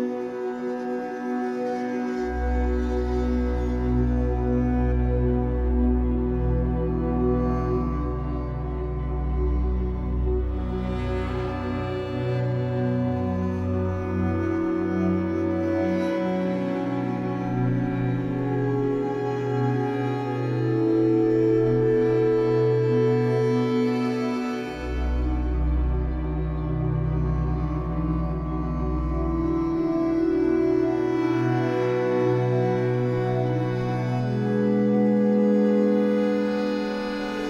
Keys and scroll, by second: 2.4 ctrl+j, 7.4 ctrl+z, 11.5 space.